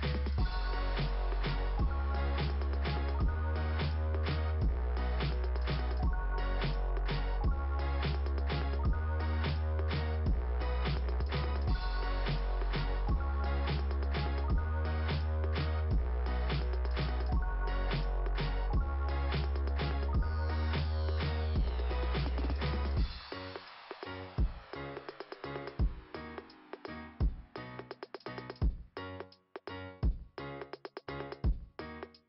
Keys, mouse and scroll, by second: 0.0-3.3 typing, 2.7 Return, 5.5 click, 6.0 click, 6.2 click, 6.3 double click, 6.7 double click, 6.8 double click, 8.4 b, 8.8 Return, 8.8 b, 9.1 Return, 13.0 click, 13.7 right click, 14.3 right click, 15.8 click, 17.1-17.7 scroll down 2, 18.5-19.2 scroll down 1, 19.4 click, 22.0 scroll down 2, 26.5 scroll down 2, 29.0 click, 29.9 right click, 30.0 click, 30.2 right click, 30.3 click, 30.4 right click, 31.9 click.